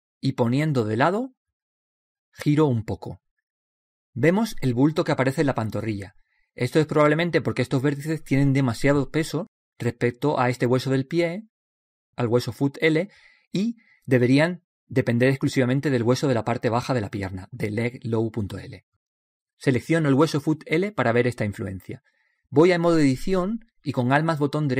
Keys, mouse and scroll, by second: 2.5-4.7 middle drag, 3.5 r, 5.8-9.4 middle drag, 10.2-12.0 middle drag, 12.7-14.4 right drag, 15.2-20.3 middle drag.